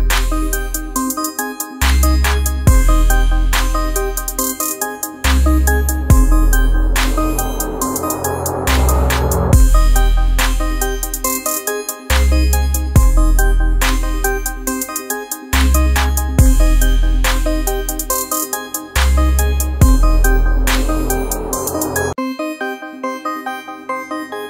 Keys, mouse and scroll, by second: 9.6-14.3 drag, 14.3-16.4 drag, 16.4-23.6 alt+drag, 23.6-24.4 drag.